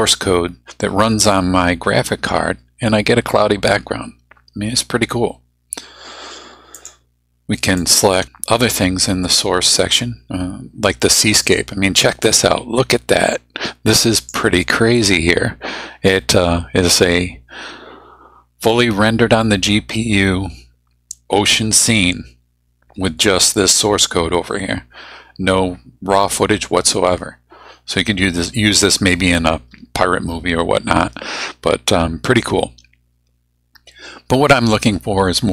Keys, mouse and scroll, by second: 6.7 click, 7.8 click, 11.4 click, 14.2 click.